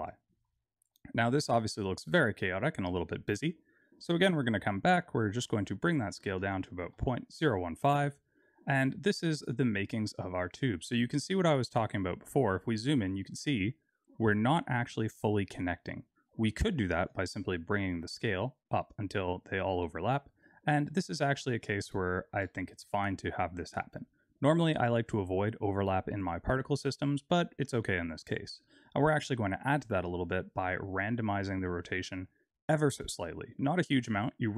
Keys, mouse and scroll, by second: 0.1 middle click, 1.5 click, 4.2 click, 5.1 click, 7.9 middle click, 9.4-10.0 scroll up 3, 10.2 shift+middle click, 11.0-12.5 scroll up 10, 16.8 click, 19.2-21.4 scroll down 11, 21.4 shift+middle click, 24.7 click, 25.3-25.7 scroll down 2, 29.1-30.2 scroll up 1, 30.5 click.